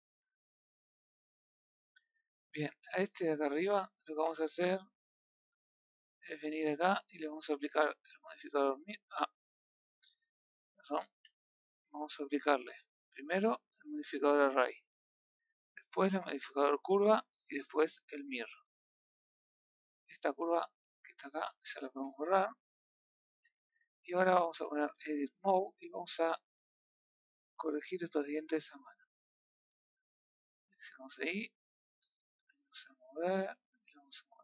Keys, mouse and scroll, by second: 1.3 scroll down 1, 1.4-2.8 middle drag, 2.8 click, 3.2-4.0 middle drag, 8.5-9.4 drag, 9.4 ctrl+z, 10.5-11.0 middle drag, 11.0 a, 11.6-12.7 middle drag, 12.7-14.5 scroll up 1, 14.5-17.9 drag, 18.1 scroll up 1, 18.2-20.5 middle drag, 20.5 click, 20.9 click, 22.0 Delete, 22.4-23.2 middle drag, 23.2 click, 23.4-23.8 middle drag, 24.9 Tab, 25.4 middle click, 26.2-26.8 scroll up 3, 26.8-30.2 middle drag, 30.2 click, 33.2 drag.